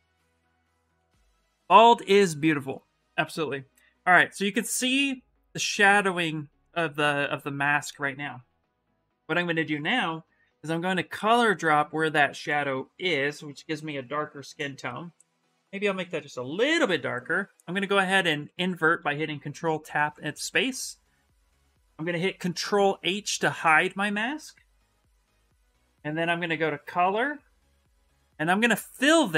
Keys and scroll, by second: 12.1 c, 14.1 shift+m, 24.4 ctrl+h.